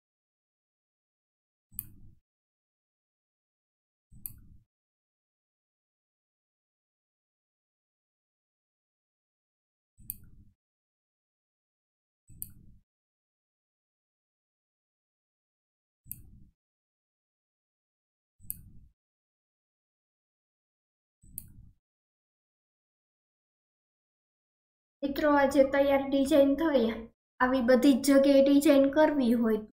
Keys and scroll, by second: 25.5 ctrl+z.